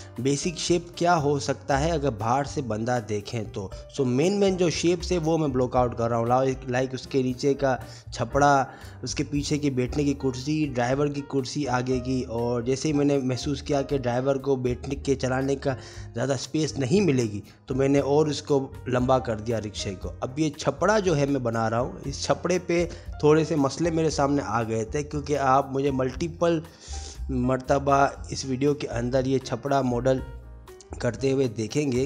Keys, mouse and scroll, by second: 0.0 middle click, 0.0 3, 0.1 click, 0.1 g, 0.3 Escape, 0.4 click, 0.7 middle click, 0.9 middle click, 1.3-3.3 typing, 1.4 click, 1.5 click, 1.8 middle click, 2.0 Tab, 2.2 Tab, 2.3 click, 2.7 middle click, 3.1 ctrl+z, 3.9 ctrl+z, 4.2 Tab, 4.3 ctrl+a, 4.8 i, 5.2 e, 5.5 middle click, 5.8 ctrl+z, 5.9 ctrl+z, 6.0 middle click, 6.1 middle click, 6.6 middle click, 7.2 middle click, 7.4 ctrl+r, 7.8 e, 7.9 click, 8.5 3, 8.7 click, 8.7 middle click, 9.8 middle click, 10.6 Tab, 11.1 click, 11.1-13.0 typing, 11.1 Tab, 11.2 middle click, 11.3 click, 11.5 click, 12.1 middle click, 12.5 middle click, 12.8 middle click, 13.0 middle click, 13.4 middle click, 13.9 click, 14.4 shift+middle click, 14.6 shift+middle click, 14.7-15.0 scroll up 1, 15.0 middle click, 15.3 scroll down 1, 15.6 middle click, 15.6 scroll down 5, 15.8 shift+middle click, 16.4 Tab, 16.5 Tab, 16.5-20.9 typing, 16.7 click, 16.7 shift+click, 17.3 middle click, 17.8 middle click, 18.2 click, 18.8 middle click, 19.4 click, 19.7 click, 20.8 middle click, 22.1 shift+middle click, 22.2 shift+middle click, 22.4 click, 22.9 middle click, 23.2 click, 23.9 middle click, 24.3 2, 24.6 click, 24.6 1, 24.8 shift+click, 24.9 s, 25.2 middle click, 25.4 middle click, 25.5 middle click, 26.1 ctrl+r, 26.5 click, 26.7 shift+click, 26.8 middle click, 26.9 g, 27.4 shift+click, 27.6 shift+click, 27.6 g, 28.0 shift+click, 28.1 shift+click, 28.2 g, 28.4 middle click, 29.6 shift+middle click, 29.7 click, 29.9 click, 30.0 g, 30.4 middle click, 30.6 middle click, 30.7 shift+click, 31.0 shift+click, 31.1 g.